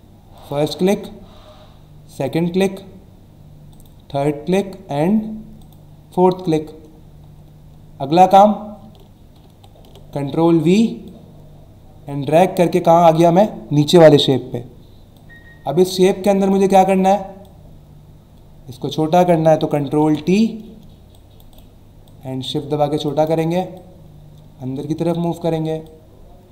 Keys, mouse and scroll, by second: 0.4 click, 2.1 click, 3.7 click, 5.6 click, 6.9 alt+scroll up 1, 9.4 ctrl+v, 11.0 click, 15.1 click, 17.4 click, 21.1 shift+click, 22.1 shift+click, 23.7 click, 25.8 shift+click.